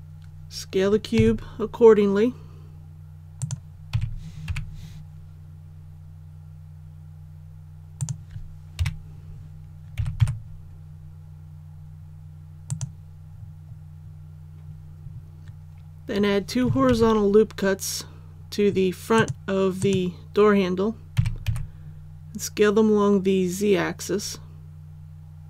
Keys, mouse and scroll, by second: 1.1 s, 3.3 click, 3.9 s, 4.4 y, 8.7 KP_1, 9.9 s, 10.1 x, 12.6 click, 13.2-13.5 scroll up 1, 16.8 ctrl+r, 18.2-18.6 scroll up 1, 19.1 click, 21.1 s, 21.4 z.